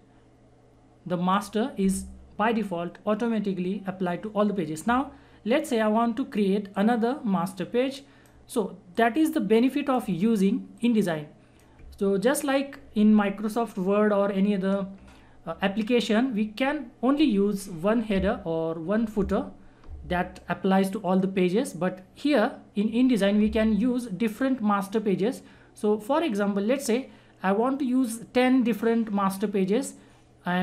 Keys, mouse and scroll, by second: 6.7-14.0 drag.